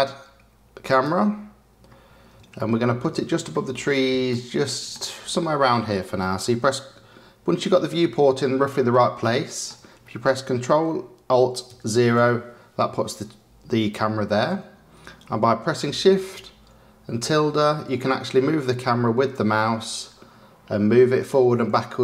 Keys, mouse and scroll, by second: 2.5-3.2 shift+middle drag, 4.2-7.2 shift+middle drag, 7.3 middle click, 7.7-11.6 middle drag, 11.6 ctrl+alt+KP_0.